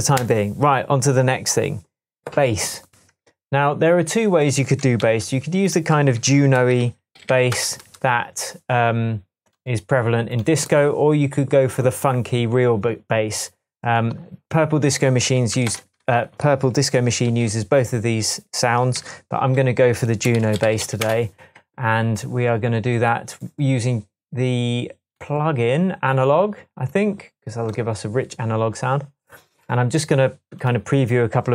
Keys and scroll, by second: 5.0 super+t, 6.6 shift+super+r, 6.7 shift+super+b, 6.8-7.7 typing, 15.7 shift+super+m, 16.8 Tab, 17.3 typing, 19.0 super+r, 20.1-21.1 typing.